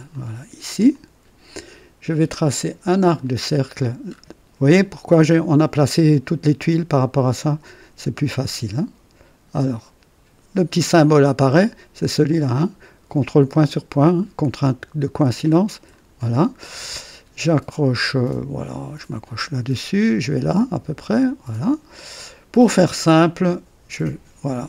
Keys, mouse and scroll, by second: 0.0 click, 0.8 click, 3.0 click, 4.0-4.3 scroll up 2, 4.6 right click, 15.8 click, 19.3 click, 21.0 click, 23.1 click.